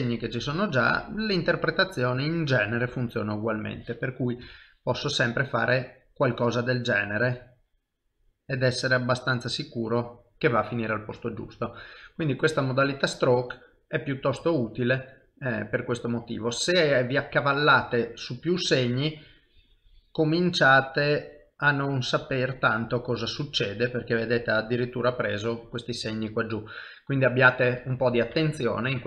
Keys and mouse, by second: 2.9 ctrl+z, 4.4 KP_1, 5.5 click, 6.8 click, 8.0 middle click, 9.5 middle click, 9.8 i, 11.7 shift+middle click, 12.3 middle click, 18.3 click, 22.5 middle click, 25.3 middle click, 28.3 ctrl+z, 28.7 middle click.